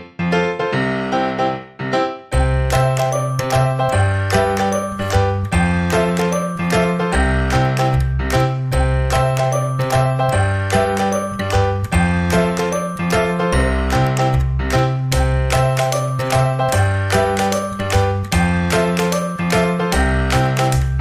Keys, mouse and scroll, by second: 0.4-2.2 drag, 3.8-8.0 drag, 6.6-8.4 middle drag, 15.6-19.1 middle drag, 16.8 Tab, 18.6 ctrl+i.